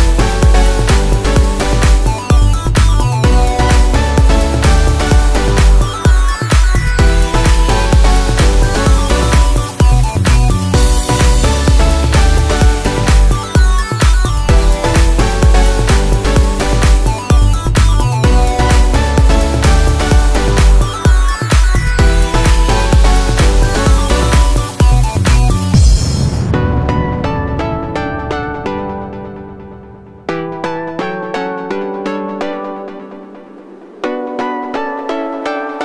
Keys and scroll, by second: 7.1 ctrl+a, 10.0 ctrl+t, 13.1 ctrl+t, 23.6 ctrl+=, 31.0 ctrl+z, 34.9 ctrl+z.